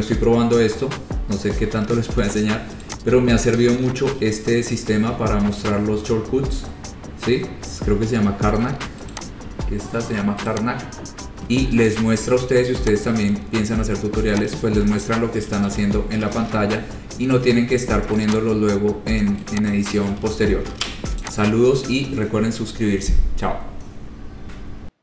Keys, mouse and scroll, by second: 1.3 scroll down 2, 1.7 scroll up 2, 3.1 click, 3.8 ctrl+c, 4.0 scroll, 4.3 ctrl+v, 9.4 click, 10.7 click, 13.0 click, 13.7-14.1 scroll, 14.2 scroll down 4, 14.6 click, 15.9 ctrl+c, 16.4 ctrl+v, 17.0 scroll, 18.6 click, 20.0 click, 20.5 ctrl+z, 21.0 ctrl+z, 21.5 click.